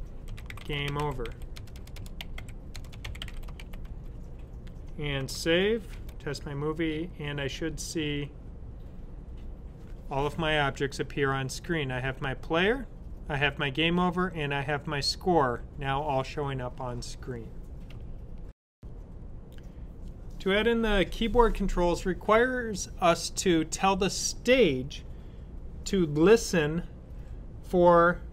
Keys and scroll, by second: 0.0-4.2 typing, 5.1 super+s.